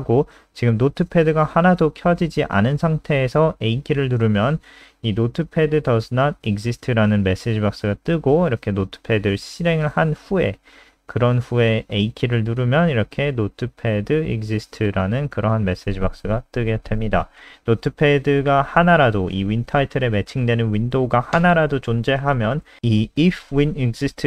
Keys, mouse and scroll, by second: 2.0 a, 6.5 click, 6.8 click, 7.5 super+n, 8.4 alt+click, 11.1 a, 13.8 click, 14.2 click, 14.8 alt+F4, 15.7 click.